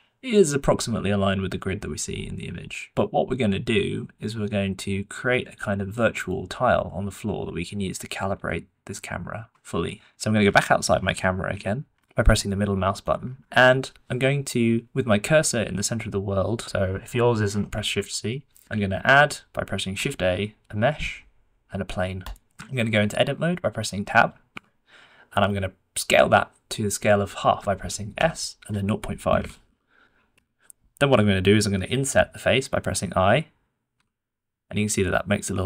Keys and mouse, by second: 11.5 KP_Decimal, 12.3-13.0 middle drag, 13.6-14.1 middle drag, 14.4 shift+middle drag, 18.2 shift+c, 18.7 shift+a, 20.0 shift+a, 22.6-23.1 shift+middle drag, 24.5 Tab, 28.1 s, 33.9 i.